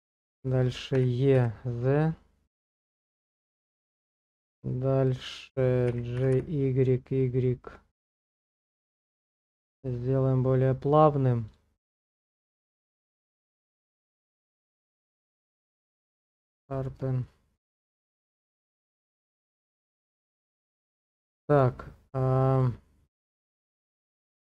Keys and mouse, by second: 1.0 e, 3.4 click, 3.4 z, 4.0 shift+middle click, 5.9 g, 6.2 y, 6.4 y, 11.5 click, 12.2 middle click, 13.2 Tab, 13.5 click, 13.8 q, 16.8 shift+middle click, 17.3-20.0 middle drag, 21.1 middle click, 23.7 shift+middle click.